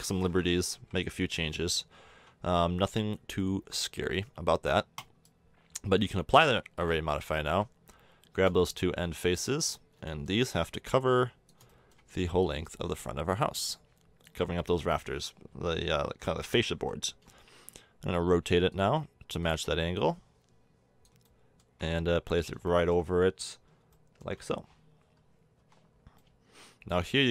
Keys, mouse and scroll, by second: 0.7 KP_1, 2.1 Tab, 2.7 Tab, 4.9 click, 6.2 Tab, 6.7-8.3 drag, 8.7-9.0 drag, 10.8 click, 15.5 l, 15.9 l, 16.2 l, 17.1 r, 19.6 click, 21.2-24.4 middle drag, 25.6 Tab.